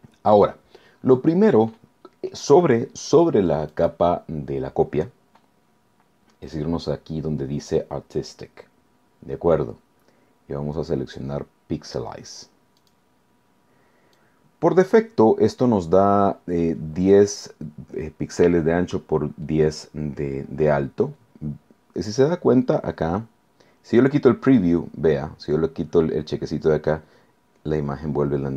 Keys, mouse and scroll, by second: 3.7 click, 12.8 click, 14.2-15.2 drag.